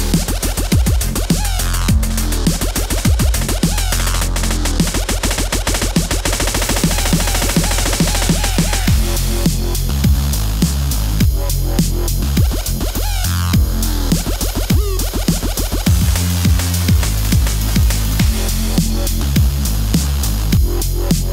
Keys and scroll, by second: 0.9 v, 1.2 space, 3.5 c, 3.6 Escape, 11.7 super+z, 15.4 super+s, 16.1 super+s, 17.5 space, 18.4 shift+g, 18.7 Home, 20.6 v, 20.9 Return.